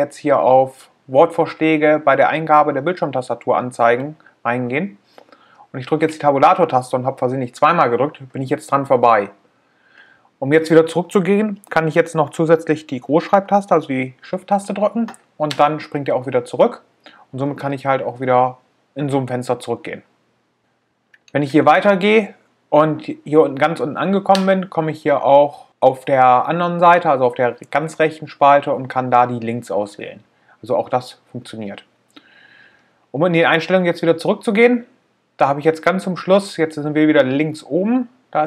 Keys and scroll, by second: 14.4 shift+Tab, 38.1 Return.